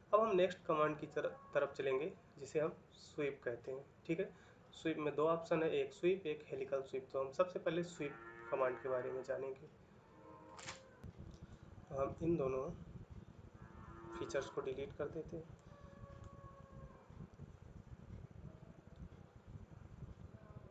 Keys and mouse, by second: 18.8 middle click.